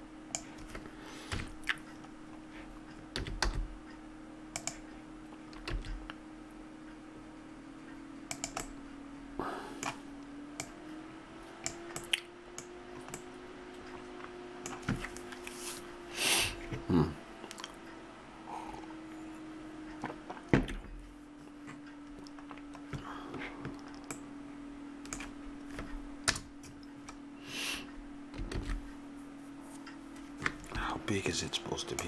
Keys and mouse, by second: 1.3 KP_Decimal, 3.1 s, 5.8 s, 8.7-10.6 middle drag, 12.0 click, 12.1 middle click, 13.2-17.7 middle drag, 24.2-26.3 middle drag, 26.3 KP_0, 28.8 shift+z.